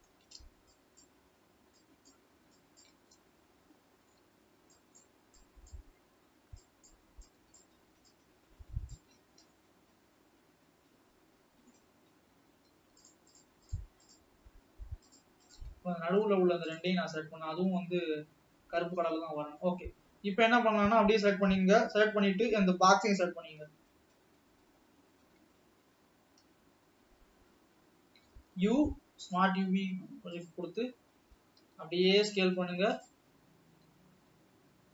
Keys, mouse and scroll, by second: 2.4 shift+click, 3.0 shift+click, 3.2-5.2 middle drag, 8.1 shift+click, 9.1 shift+click, 9.5-12.1 middle drag, 12.1-12.6 scroll up 1, 13.5 shift+click, 13.9 shift+click, 14.2 shift+click, 15.5 shift+click, 15.7 shift+click, 15.9 scroll down 2, 17.0 shift+click, 17.2-19.9 middle drag, 19.9-20.8 scroll down 4, 23.6-27.4 typing, 30.6 u, 31.7 s, 34.0 g.